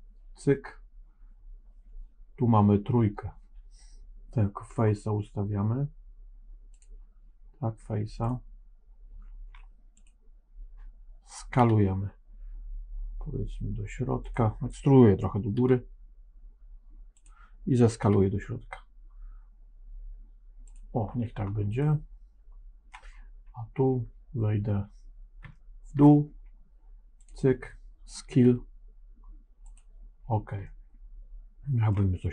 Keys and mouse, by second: 4.6 3, 6.6 click, 7.5 3, 8.1 click, 11.5 s, 15.5 e, 17.9 s, 21.8-22.9 middle drag, 25.5 shift+middle click, 27.1 click, 28.2 s, 30.6-32.0 middle drag.